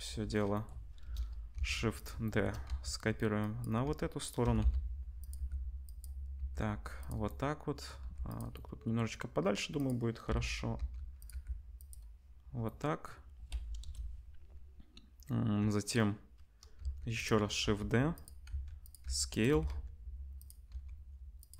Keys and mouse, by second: 0.9 KP_0, 1.5 shift+d, 2.6 r, 3.8-9.7 middle drag, 3.8 r, 4.4 g, 5.3 g, 6.3 g, 8.0 g, 9.7 click, 9.8-14.3 middle drag, 10.2 l, 10.7 r, 11.3 g, 13.8 KP_0, 16.8-19.5 typing, 20.7 r.